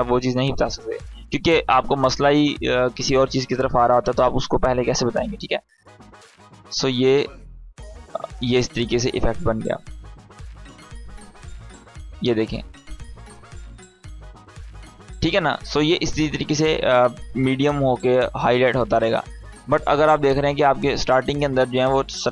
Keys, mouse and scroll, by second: 19.0-21.6 drag.